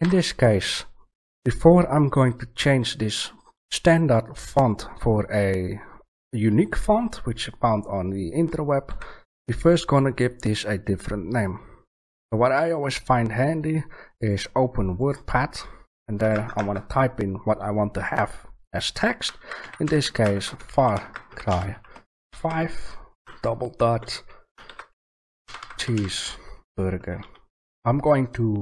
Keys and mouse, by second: 8.9 a.